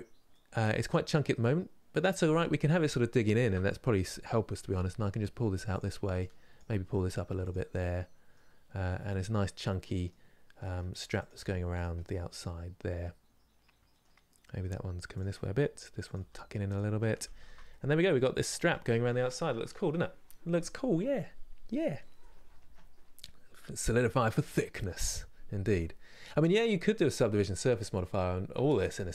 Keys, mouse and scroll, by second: 0.1-2.0 middle drag, 2.0 click, 3.4-4.5 middle drag, 4.5 g, 6.2 click, 6.4 g, 7.4-10.9 middle drag, 10.9 click, 11.0 g, 11.7-14.3 middle drag, 14.3 g, 15.1 middle click, 15.8 click, 15.9 g, 16.8 scroll down 1, 17.1 Tab, 17.4-18.5 middle drag, 18.5-19.0 scroll down 1, 19.7-29.1 middle drag.